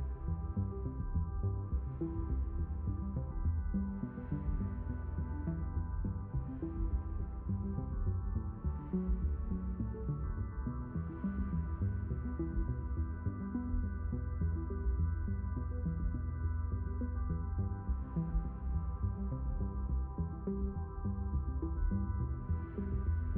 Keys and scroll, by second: 0.4 shift+n, 1.2 s, 3.5 shift+n, 4.2 s, 5.8 q, 10.5 5.